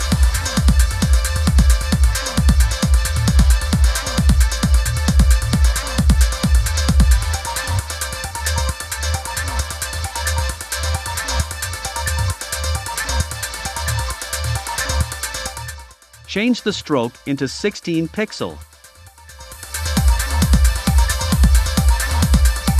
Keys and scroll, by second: 0.0-0.6 typing.